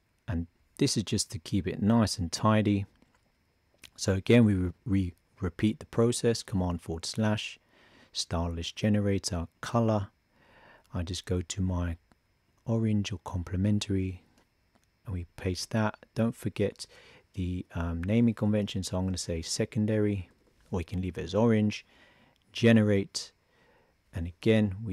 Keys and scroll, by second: 6.4 super+/, 13.6 super+c, 15.7 super+v, 18.0 shift+s.